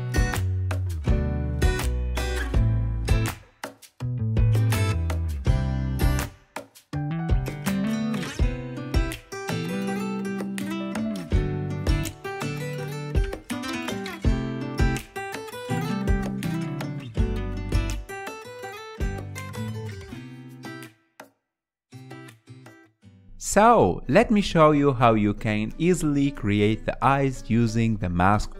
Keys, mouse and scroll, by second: 0.1 KP_1, 0.2 ctrl+middle click, 0.4 click, 0.5 f, 0.6 click, 1.5 ctrl+middle click, 1.9 KP_3, 2.0 ctrl+middle click, 2.7 KP_1, 2.9 ctrl+middle click, 3.2 click, 3.6 f, 3.7 click, 4.1 ctrl+middle click, 4.2 click, 4.5 ctrl+shift+middle click, 4.9 KP_3, 5.0 ctrl+middle click, 5.1 f, 5.2 click, 5.4 ctrl+z, 5.5 click, 5.9 ctrl+middle click, 6.1 click, 6.2 ctrl+middle click, 6.6 click, 7.2 f, 7.3 click, 7.4 ctrl+middle click, 7.7 KP_1, 7.8 ctrl+shift+middle click, 8.1 shift+click, 8.2 middle click, 8.4 shift+click, 8.5 f, 8.6 click, 8.9 middle click, 9.1 click, 9.3 ctrl+z, 9.5 click, 9.6 middle click, 9.7 ctrl+z, 9.8 ctrl+shift+click, 10.3 middle click, 10.7 shift+click, 11.1 middle click, 11.2 shift+click, 11.4 ctrl+shift+middle click, 11.9 shift+click, 12.7 shift+click, 12.8 middle click, 12.9 shift+click, 13.1 ctrl+middle click, 13.6 shift+click, 13.7 ctrl+middle click, 14.0 click, 14.1 f, 14.2 click, 14.4 middle click, 14.8 click, 15.0 ctrl+middle click, 15.3 KP_1, 15.4 ctrl+shift+middle click, 16.0 click, 16.4 f, 16.5 click, 16.9 middle click, 17.1 click, 17.6 f, 17.7 click, 17.9 ctrl+z, 18.1 middle click, 18.4 click, 18.6 f, 18.6 shift+click, 19.2-20.9 ctrl+middle drag, 20.9 click, 21.4 middle click, 21.6 ctrl+z, 21.9 click, 22.7 shift+middle click, 22.9 shift+click, 23.0 middle click, 23.1 shift+click, 23.3-26.2 ctrl+shift+middle drag, 26.2 click, 27.0 f.